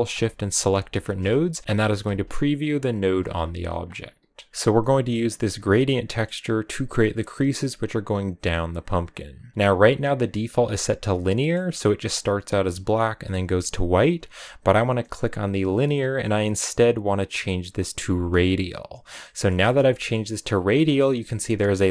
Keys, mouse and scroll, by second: 0.5 ctrl+shift+click, 1.5 ctrl+shift+click, 1.6 scroll down 1, 1.7 scroll up 2, 2.0 ctrl+shift+click, 2.8 ctrl+shift+click, 4.3 scroll up 8, 4.5-11.4 middle drag, 11.4-12.0 scroll down 1, 17.8-18.2 scroll down 1, 18.2 click, 18.8 scroll down 1, 19.1 middle click, 20.0-20.6 scroll up 2, 20.6-21.9 middle drag.